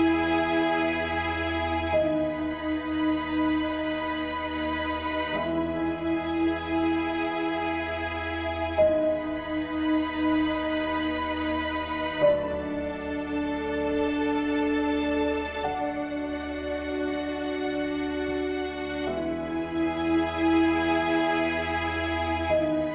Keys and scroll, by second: 3.0 ctrl+alt+s, 12.1 ctrl+alt+s.